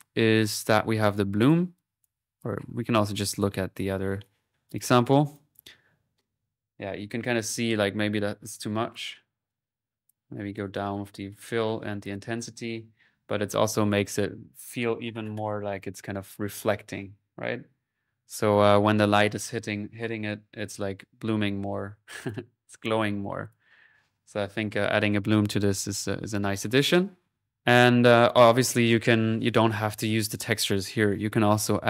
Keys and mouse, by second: 0.4 middle click, 1.1-2.2 drag, 2.2 typing, 4.8-6.6 drag, 9.0-12.6 drag, 22.2 click, 23.5-24.6 drag, 25.2 middle click, 25.6 click, 28.1 click, 28.7-30.0 middle drag, 31.1 click, 31.5-31.8 typing.